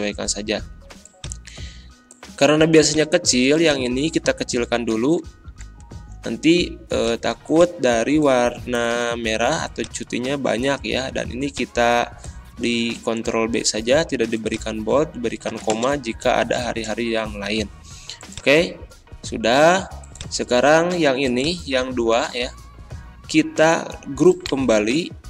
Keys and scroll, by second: 3.9 ctrl+a, 4.7 ctrl+[, 13.0 ctrl+b, 15.7 space, 16.4 BackSpace.